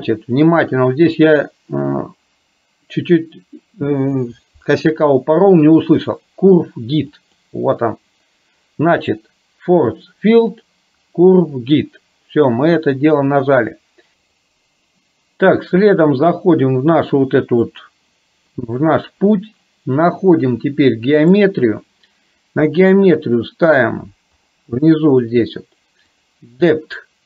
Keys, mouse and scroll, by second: 14.4 click, 17.9 click, 21.4 click, 26.2-27.2 drag.